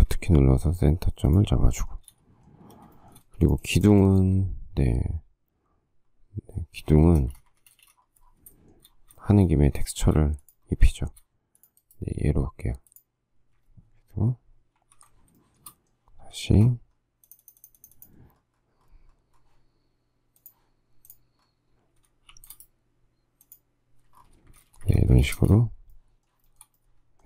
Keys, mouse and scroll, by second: 1.5 shift+click, 1.7 shift+scroll, 2.0 shift+middle click, 3.1 shift+middle click, 3.4 space, 7.0 space, 7.1 Escape, 7.8 Escape, 7.9 space, 8.7 shift+middle click, 9.5 shift+middle click, 10.0 shift+middle click, 10.2 shift+scroll, 11.1 shift+middle click, 11.3 shift+middle click, 15.0 ctrl+g, 15.6 shift+middle click, 16.6 shift+middle click, 22.5 shift+v, 22.7 shift+right click, 24.5 space, 24.6 Escape, 25.3 space, 25.4 Escape, 26.7 shift+middle click.